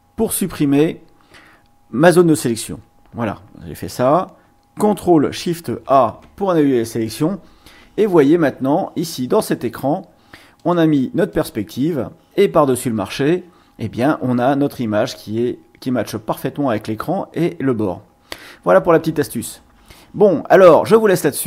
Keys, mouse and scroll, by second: 5.8 ctrl+shift+a, 8.9 click, 9.6 click, 10.6 click, 11.3 click.